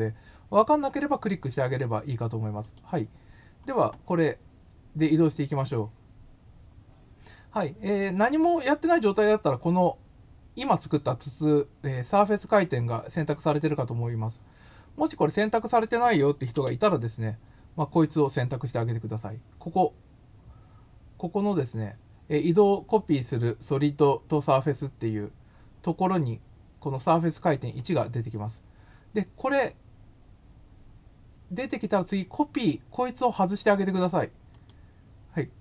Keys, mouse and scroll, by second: 2.6 click, 6.9 scroll up 1, 15.7 click, 18.2 click, 34.4 click.